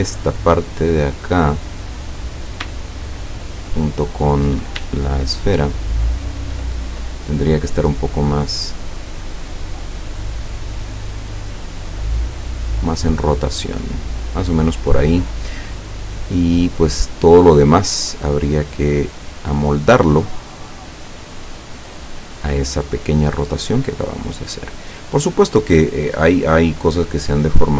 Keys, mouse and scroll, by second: 2.9 shift+click, 5.1-6.4 shift+drag, 7.1 click, 7.8 click, 12.2 click, 14.9 click, 17.9 scroll down 1, 19.1-21.7 drag, 22.3-24.8 drag, 25.2 click, 27.5 click.